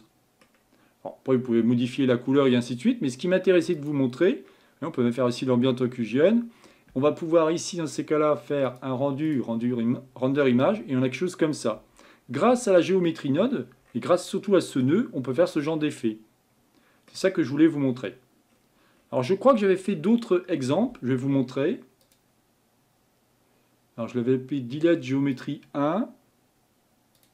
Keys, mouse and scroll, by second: 2.1-2.4 scroll down 1, 2.4-3.5 scroll up 1, 3.8 click, 12.9-13.5 scroll down 1, 13.5-13.9 scroll down 4, 15.6-27.3 middle drag.